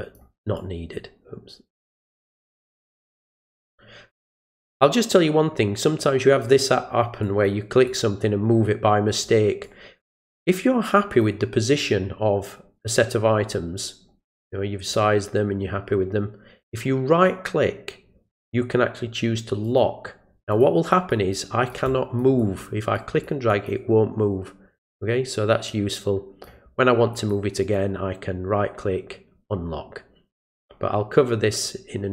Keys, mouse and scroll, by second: 0.6-2.8 drag, 3.3-6.4 drag, 7.2 click, 7.9-9.2 drag, 9.6-10.3 drag, 11.1 click, 13.8-14.9 drag, 17.1 right click, 19.6 click, 20.5 click, 20.9 click, 21.3 click, 21.9-22.2 drag, 22.4 drag, 22.9-23.2 drag, 23.5 click, 24.7 click, 25.7-26.4 drag, 27.1 click, 27.6 right click, 30.4 click.